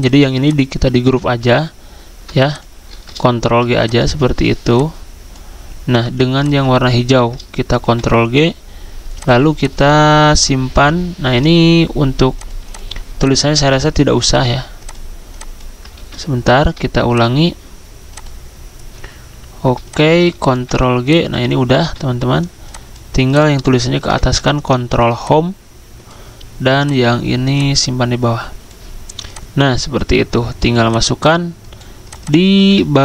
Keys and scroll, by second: 1.2 ctrl+z, 3.5 ctrl+g, 7.8 ctrl+g, 10.2 ctrl+z, 16.0 ctrl+z, 20.5 ctrl+g, 24.1 ctrl+Home, 32.6 ctrl+a.